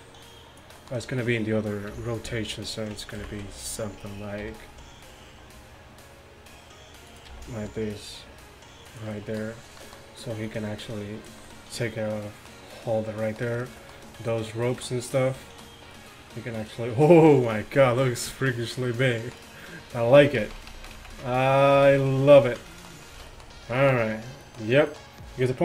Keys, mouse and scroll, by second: 1.9 KP_3, 3.2 ctrl+KP_1, 4.5 r, 7.3 g, 9.2 middle drag, 10.5-12.3 drag, 14.7-16.2 middle drag, 20.5 ctrl+z, 20.7 ctrl+z, 20.9 ctrl+z, 21.1 ctrl+z, 21.3 ctrl+z, 22.1 ctrl+z, 23.2 a.